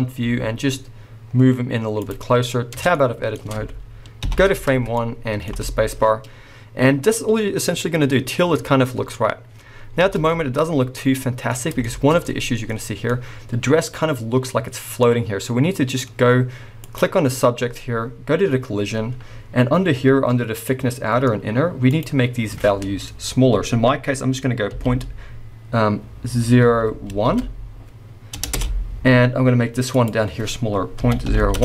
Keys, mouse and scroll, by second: 2.9 Tab, 2.9-15.0 middle drag, 4.4 shift+Left, 5.5 space, 11.5 scroll up 2, 12.7-13.1 scroll up 2, 13.8 scroll up 1, 15.1 middle click, 15.4-16.8 middle drag, 16.8 click, 17.8-20.7 scroll down 1, 21.9-31.6 drag, 28.6 Return.